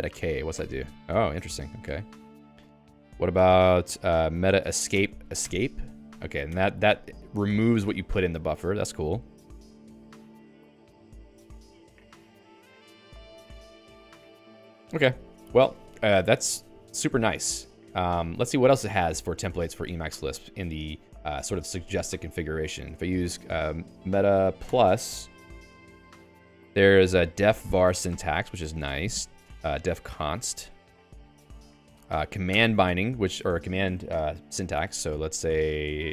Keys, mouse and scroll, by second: 1.0 alt+k, 25.5 Return, 26.8 Down, 27.1 Down, 27.3 Down, 27.8 Down, 28.2 Down, 28.5 Down, 28.8 Down, 29.1 Down, 29.7 Down, 30.0 Down, 30.3 Down, 30.7 Down, 30.9 Down, 31.1 Down, 31.5 Down, 31.7 Down, 32.5 Return.